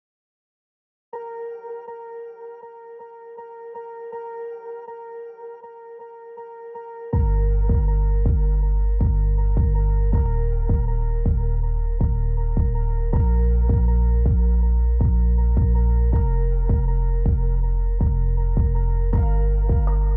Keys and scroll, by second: 3.2 F3, 12.3 F3.